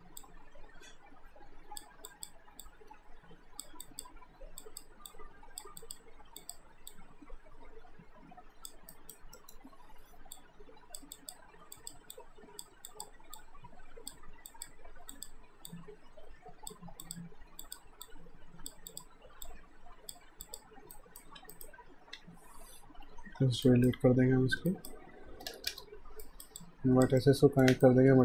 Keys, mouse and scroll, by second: 8.9 alt+right click, 9.4 alt+middle click, 10.4 click, 21.0 alt+right click, 21.4 q, 21.6 right click, 23.1 alt+shift+d, 23.6 alt+right click, 24.7 alt+right click, 25.5 space, 26.2 alt+right click, 26.6 alt+click, 27.2 alt+middle click, 27.8 shift+right click.